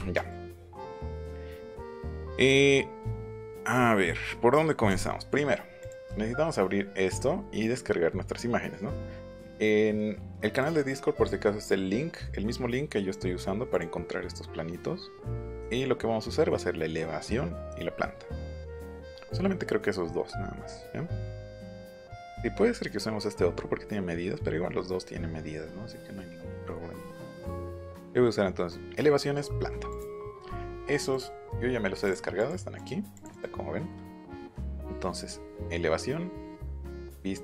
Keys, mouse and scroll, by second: 4.9 click, 6.8 scroll down 1, 7.2-7.5 scroll up 2, 7.8-8.2 scroll down 2, 10.5 click, 13.7 click, 14.1 scroll up 1, 14.5 scroll down 1, 14.9 scroll up 1, 15.6 scroll up 1, 16.9 scroll down 1, 17.9 scroll down 1, 19.1 scroll up 1, 20.0 scroll up 1, 20.3-20.9 scroll down 3, 21.8 scroll up 1, 23.0 scroll down 1, 23.5 scroll up 2, 24.2 scroll down 1, 24.5 scroll up 1, 25.0 scroll down 1, 25.3 scroll up 1, 25.5-25.8 scroll down 2, 26.3-26.7 scroll up 2, 26.9 scroll down 1, 27.5 scroll down 1, 27.9 scroll up 1, 28.6 scroll up 1, 29.9 click, 31.1 click, 32.1 click, 32.4 click, 32.8 click, 33.3 click, 34.6 click.